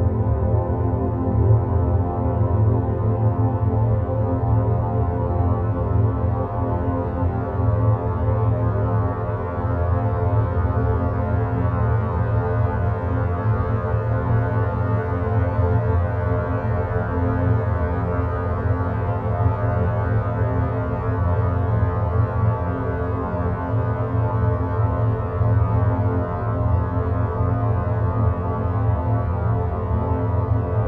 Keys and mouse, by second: 3.9 click, 5.0 click, 5.7 3, 7.4 ctrl+z, 11.2-15.3 drag, 19.1 Tab, 19.6 click, 20.3 Tab, 21.3 a, 22.0 e, 27.0 e.